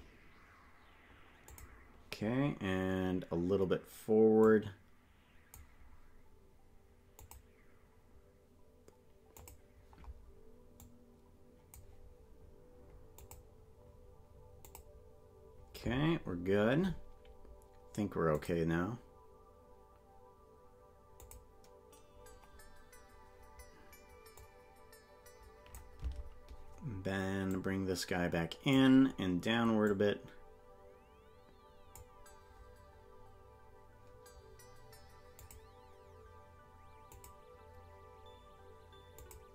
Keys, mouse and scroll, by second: 1.4 click, 4.4-5.6 drag, 7.1-9.6 drag, 10.8-11.8 drag, 13.2 click, 14.6 click, 18.3 click, 21.1 click, 24.4-25.8 drag, 26.1 Left, 27.5-28.8 drag, 29.8-32.0 drag, 35.3-37.3 drag, 39.2 click.